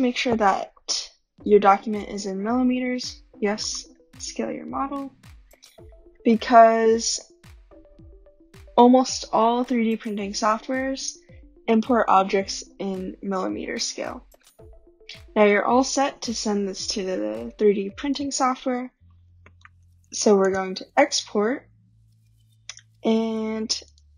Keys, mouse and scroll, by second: 0.9 click, 3.8 click, 5.5-7.0 scroll, 9.5 scroll, 10.4 shift+right click, 11.1 scroll, 14.5 click, 16.7-17.6 drag, 18.1-20.1 drag, 18.9-20.6 typing, 23.9 click.